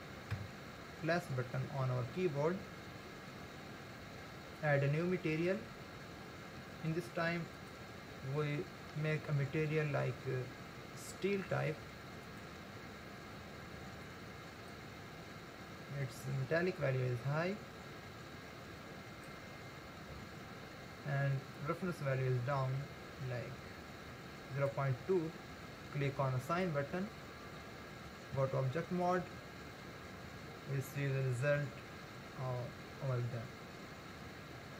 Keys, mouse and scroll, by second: 0.4 ctrl+KP_Add, 1.8 scroll down 2, 2.7 scroll down 2, 4.3 scroll up 1, 5.4-10.6 drag, 12.3 click, 16.8-19.6 drag, 19.6-20.6 scroll down 2, 21.5-24.6 drag, 26.5-28.4 drag, 28.4 Tab, 29.9-31.2 scroll down 1, 31.2-31.7 scroll down 2, 31.7-34.6 middle drag.